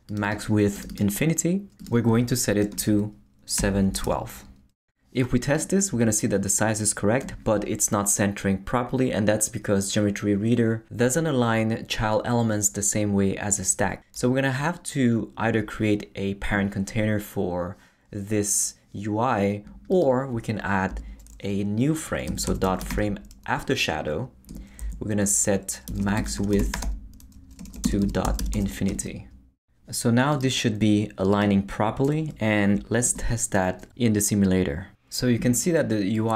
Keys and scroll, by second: 3.3-4.5 typing, 20.9 Return, 22.0-23.4 typing, 24.5 Return, 24.8 Left, 25.6-29.0 typing, 33.0 super+r.